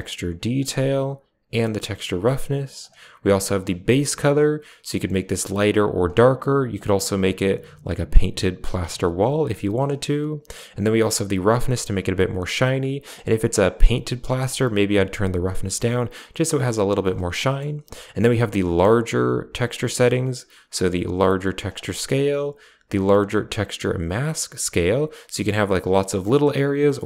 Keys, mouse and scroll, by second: 0.9-2.7 drag, 3.0 click, 10.6-12.9 drag, 14.6-17.0 drag, 17.3 middle click, 18.2-21.6 drag, 22.8-27.0 drag.